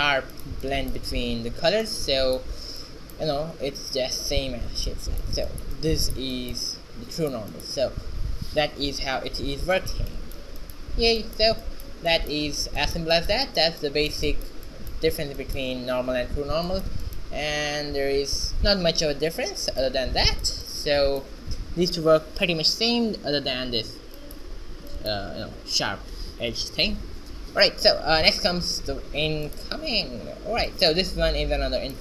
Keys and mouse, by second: 2.1 shift+z, 2.6 z, 6.6 shift+z, 16.4 r, 17.2 middle click, 28.1-29.7 drag, 31.1 q.